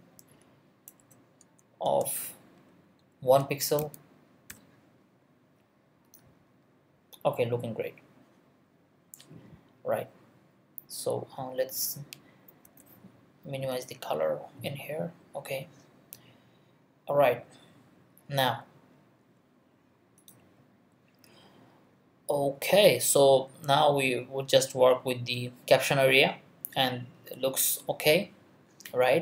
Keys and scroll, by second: 1.8 space, 2.9-4.5 typing, 12.6 2.